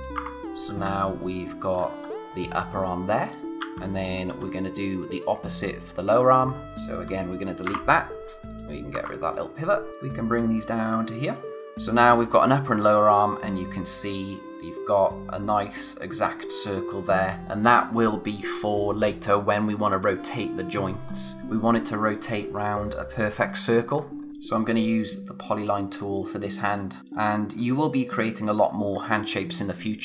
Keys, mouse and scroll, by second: 0.4-0.8 scroll down 1, 1.0 click, 1.3 space, 2.0-3.2 scroll up 1, 3.2 click, 3.6 a, 4.2 scroll down 1, 4.4 space, 4.6 click, 4.9 space, 6.1-6.6 scroll up 1, 6.6 click, 9.9 space, 9.9 click, 12.8-14.9 scroll up 1, 15.9-16.2 scroll down 1, 24.3 click, 25.9-27.0 scroll up 1, 27.0 space, 27.4 scroll down 1, 27.6 space, 27.8 click, 28.1 space.